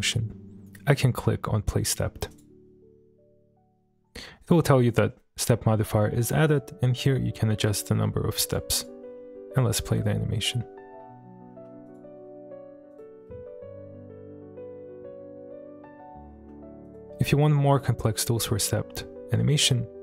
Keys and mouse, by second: 2.3 click, 4.4 click, 8.4 click, 8.8 click, 9.2 space, 11.5 space, 11.9 click, 12.9 click, 13.4 space, 16.4 space, 16.9 click.